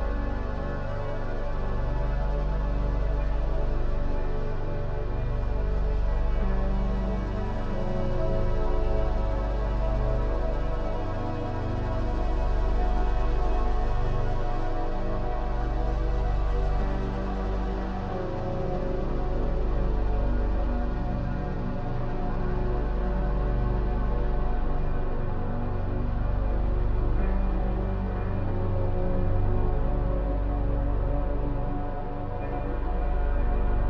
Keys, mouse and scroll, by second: 0.6-1.2 scroll up 1, 1.2-4.1 middle drag, 4.1 shift+click, 5.4 ctrl+l, 8.3 ctrl+l, 9.2 click, 9.6 click, 12.3 Tab, 13.5 Tab, 13.8-15.0 right drag, 15.0 Tab, 16.7 click, 17.5 click, 18.3 Tab, 19.0 Tab, 19.4 a, 20.2 shift+e, 22.5 click, 23.2 middle click, 23.6 Tab, 24.1 middle click, 24.7 Tab, 25.4 click, 26.0 ctrl+z, 26.3 shift+e, 30.5 shift+e.